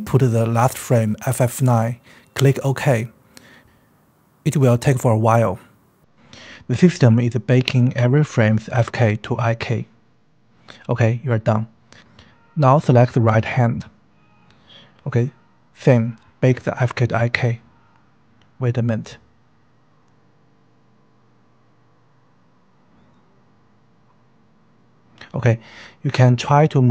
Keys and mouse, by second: 0.9 KP_5, 13.9 click, 15.6-24.5 drag.